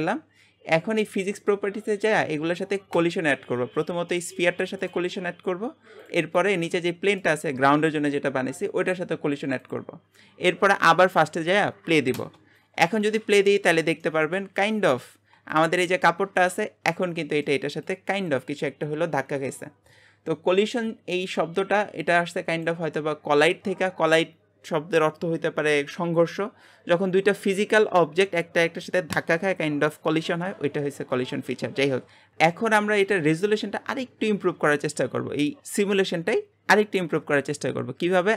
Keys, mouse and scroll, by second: 2.9-4.1 drag, 4.1 middle click, 4.5 g, 6.0 click, 6.7 g, 9.6-12.1 drag, 12.1 space, 13.5-15.1 middle drag, 15.1 space, 15.5 click, 15.8 middle click, 16.6 scroll up 2, 16.9-32.0 middle drag, 32.0 scroll up 1, 32.3-35.6 middle drag, 38.2-38.3 drag.